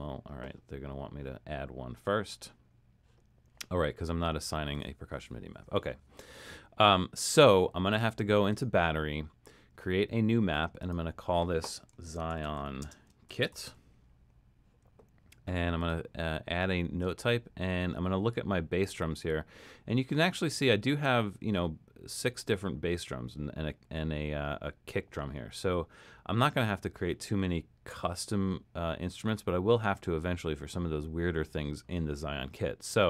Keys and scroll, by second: 11.8-15.8 typing.